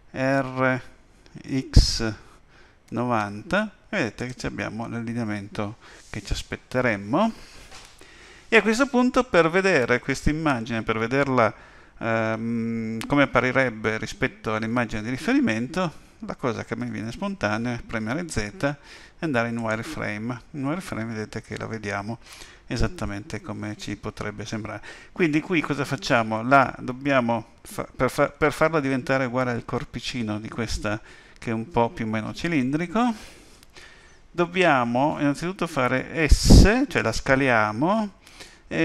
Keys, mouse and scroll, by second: 0.3 r, 16.8 z.